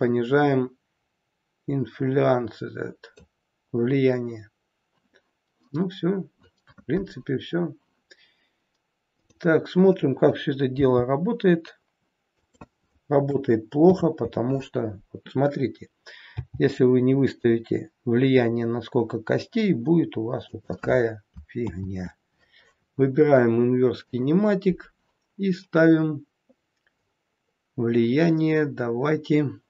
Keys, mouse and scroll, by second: 5.8-6.4 scroll down 2, 9.1 click, 10.7 g, 16.3 g, 21.6 ctrl+z, 24.0 click, 26.8-27.8 scroll down 5.